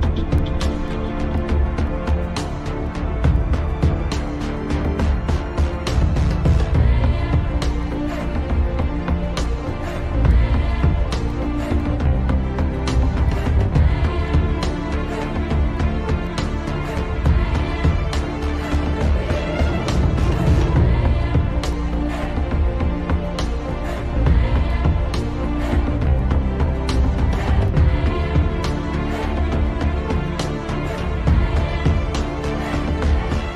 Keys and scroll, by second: 8.3 shift+F2, 30.1 F3.